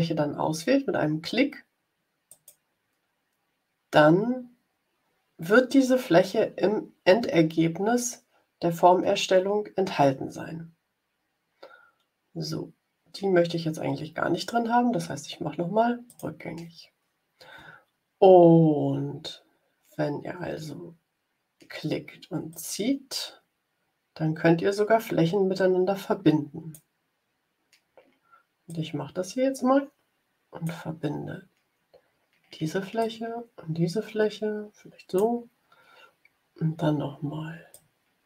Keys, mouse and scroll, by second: 2.2 click, 16.0 click, 22.4-26.8 drag, 28.6-30.8 drag, 32.9-35.3 drag, 37.6-38.2 drag.